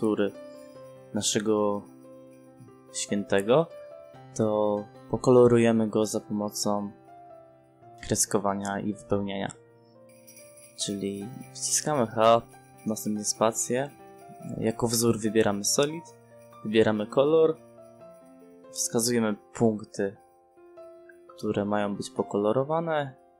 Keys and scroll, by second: 6.3 f, 6.4 space, 9.9 3, 10.1 5, 10.7 0, 11.9 space, 14.9 h, 15.0 space.